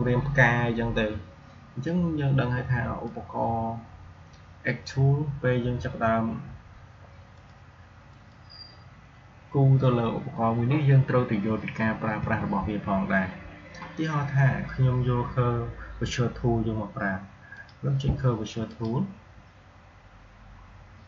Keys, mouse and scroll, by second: 2.9-7.1 drag, 7.2 click, 12.1 Delete, 17.4 click.